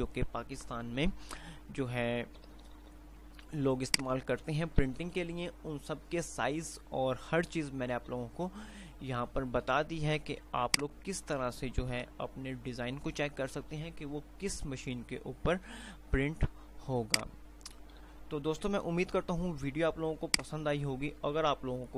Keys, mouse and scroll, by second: 2.9 Page_Up, 3.6 Page_Up, 4.3 click, 4.9 Page_Up, 8.1 Page_Up, 10.8 click, 12.4 Page_Up, 17.6 click, 18.3 click, 19.6 Page_Down, 20.6 click.